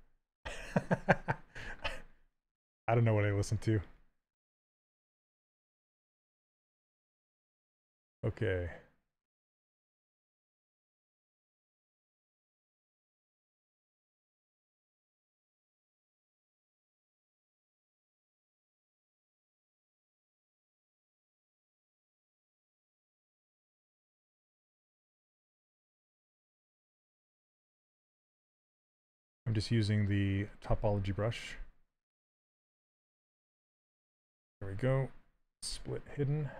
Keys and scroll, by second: 28.1 s, 35.6 2.